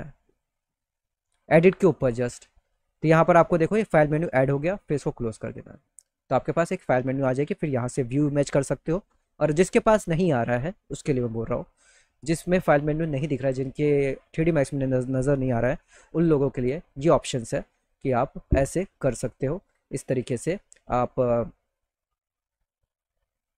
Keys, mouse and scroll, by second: 4.9 click, 4.9 right click, 6.2 click, 7.7 click, 15.1 click, 17.1 click, 17.3 click, 19.2 click, 22.3 click, 23.1 middle click.